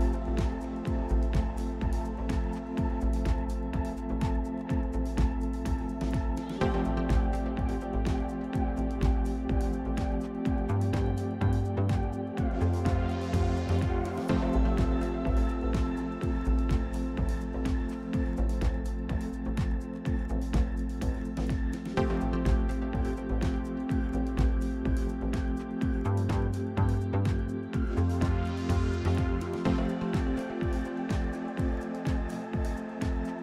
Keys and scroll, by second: 11.9 r, 19.1-20.9 typing, 21.1 Return, 30.9-33.4 typing.